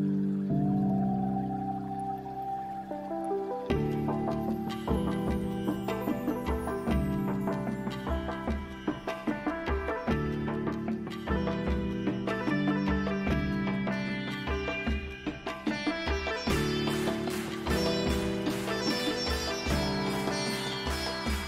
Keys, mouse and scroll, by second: 0.3-2.1 right drag, 0.7-2.5 middle drag, 4.3-6.4 middle drag, 11.2-13.7 right drag, 13.7-15.5 drag, 19.9-21.4 middle drag.